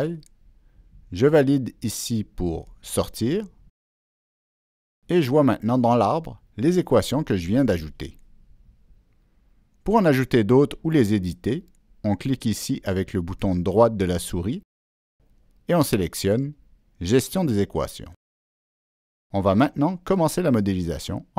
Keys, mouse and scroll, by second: 3.0 click, 5.1 click, 7.6 click, 10.1 click, 12.7 click, 13.3 right click, 19.6 click.